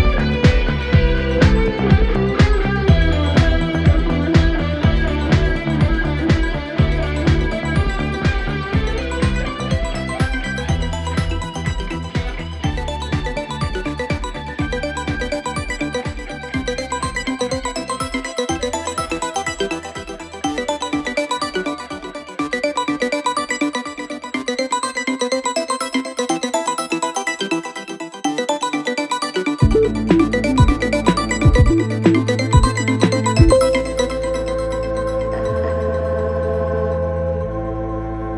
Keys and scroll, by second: 0.2 Delete, 16.3 ], 21.0 4, 23.7 Delete, 26.4 9, 26.5 Return, 27.3 ctrl+shift+z, 30.8 shift+z, 31.2 3, 31.8 shift+z, 33.0 ].